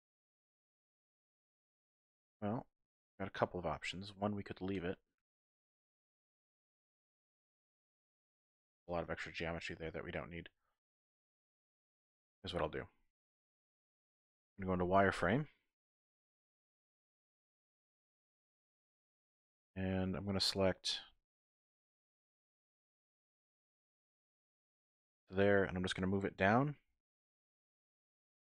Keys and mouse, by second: 2.6-5.5 middle drag, 5.5-6.9 drag, 6.9-8.3 middle drag, 8.6 Tab, 9.0 Tab, 9.6 middle click, 10.5 shift+middle click, 11.4 KP_1, 12.7 shift+middle click, 14.6 z, 15.7 1, 18.5 click, 19.0-20.6 drag, 21.8 shift+click, 22.2 z, 26.6 z, 26.8 g, 27.1 z.